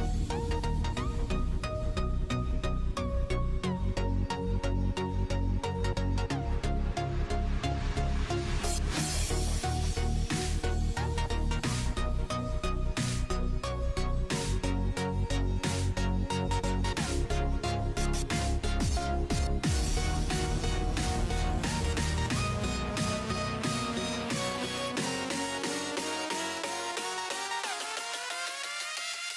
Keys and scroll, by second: 0.6-1.7 typing, 4.6-5.6 typing, 15.7-16.8 typing, 23.4-26.8 typing.